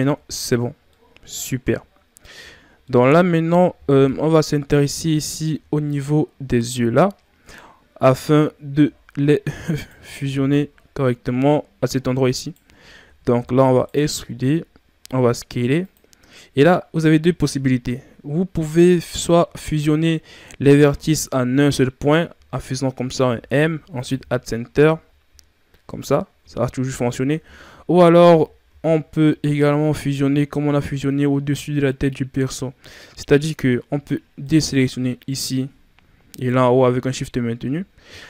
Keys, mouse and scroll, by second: 0.0 Tab, 0.8-2.3 middle drag, 2.3 Tab, 2.8-4.0 middle drag, 4.0 KP_1, 5.0-6.1 ctrl+scroll up 4, 6.7-7.0 scroll up 3, 8.7 e, 10.3 ctrl+z, 12.4 alt+right click, 13.2 e, 16.1 scroll up 4, 17.0 ctrl+scroll down 3, 17.9-19.4 shift+scroll down 2, 20.8-21.6 shift+scroll down 2, 23.2 m, 24.3-24.7 scroll down 4, 24.7 Tab, 25.0-25.3 scroll down 3, 25.8-26.3 scroll up 7, 26.3 Tab, 27.6 ctrl+z, 28.2 ctrl+z, 29.1 scroll up 2, 30.2-31.6 scroll down 4, 32.4-33.3 scroll up 5, 33.3-33.6 scroll up 2, 34.4 shift+right click, 36.2 shift+Right, 36.2 right click, 37.8-38.2 scroll up 2.